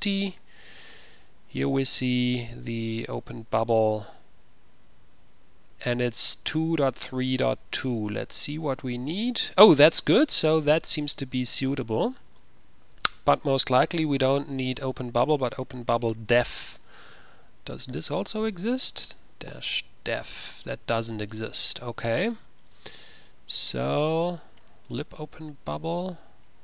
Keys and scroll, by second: 18.8-19.8 typing, 19.8 Return.